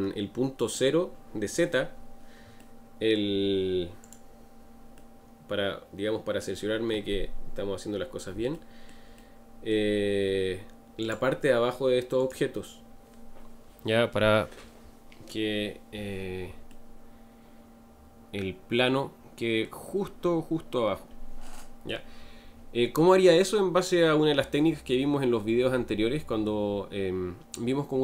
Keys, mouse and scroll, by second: 4.1 click, 4.9-7.6 middle drag, 7.6-9.2 scroll up 2, 9.2-11.1 shift+middle drag, 11.1 click, 12.3 click, 16.7-27.1 middle drag, 27.1-28.0 scroll up 2.